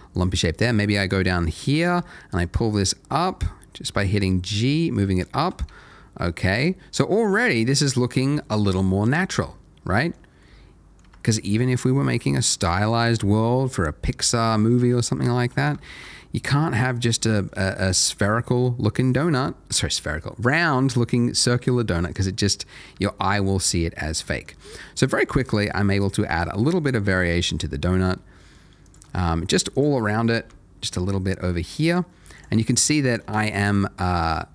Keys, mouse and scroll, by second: 0.1 click, 0.4 middle click, 1.8 g, 4.4 click, 4.9 middle click, 5.6 Tab, 5.9 Tab, 8.1-8.5 scroll down 1, 8.5 middle click, 10.1-10.4 scroll up 1, 10.4 middle click, 11.0 Tab, 11.4 click, 12.0 g, 12.9 click, 13.3 middle click, 15.8 shift+middle click, 16.4 middle click, 16.9 click, 17.2 middle click, 19.3 g, 20.3-22.0 scroll down 1, 22.0 click, 22.3 middle click, 22.9 Tab, 23.1 middle click, 24.8 middle click, 25.4 click, 25.7 middle click, 26.2 g, 26.6-27.4 scroll, 27.4 click, 27.6 middle click, 28.8 click, 29.1 shift+middle click, 29.7 click, 30.0 middle click, 30.4 g, 31.8 click, 32.6 middle click, 34.0 middle click.